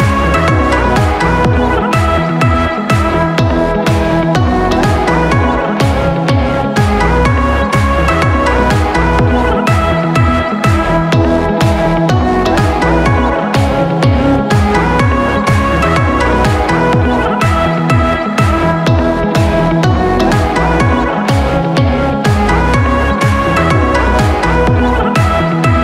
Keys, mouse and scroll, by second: 0.0 shift+click, 0.3 middle click, 1.1 shift+click, 1.3 middle click, 2.1-3.0 scroll down 1, 13.4-13.8 scroll up 3, 13.8 scroll down 1, 14.0-17.2 middle drag, 17.2 click, 17.8 click, 18.0 middle click, 18.9 shift+click, 19.2-20.3 middle drag, 20.3 shift+click, 20.5-22.1 middle drag, 22.1 shift+click, 22.3 middle click, 22.7 scroll down 1, 23.7-25.8 drag.